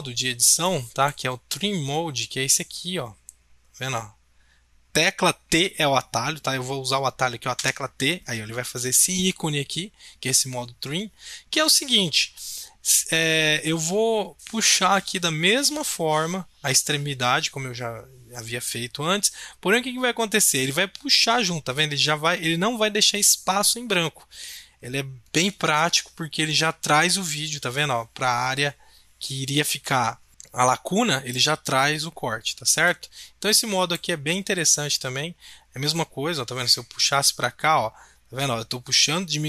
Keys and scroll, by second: 7.6 t.